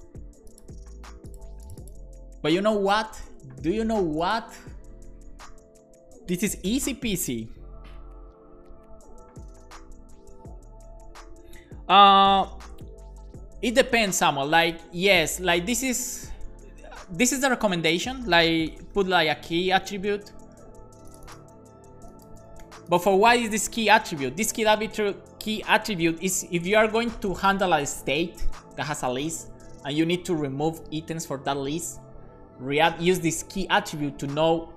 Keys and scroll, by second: 17.2 Return, 17.5 space, 17.9 space, 19.9 shift+[, 21.6 super+c, 22.4 super+v, 22.6 super+s.